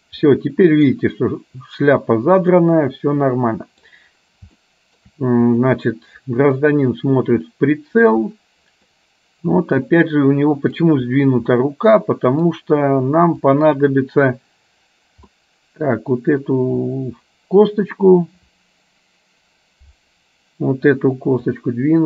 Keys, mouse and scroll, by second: 0.3 middle click, 2.6-4.1 middle drag, 4.7 shift+middle click, 7.7 middle click, 9.1-10.8 middle drag, 11.6-12.6 middle drag, 13.7 click, 15.4 middle click, 21.8-22.0 drag.